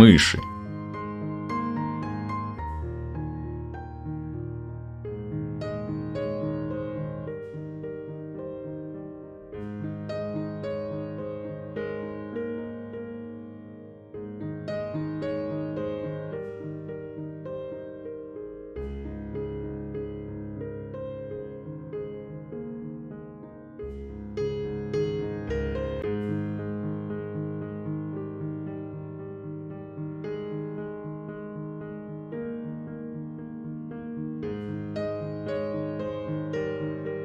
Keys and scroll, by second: 5.6 f, 10.4 f, 19.8 alt+f, 32.5 ctrl+z, 33.7 f, 36.6 f.